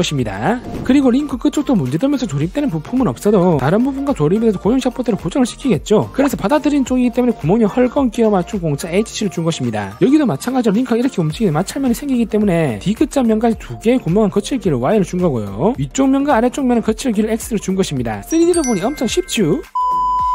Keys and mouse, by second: 10.2-19.7 drag.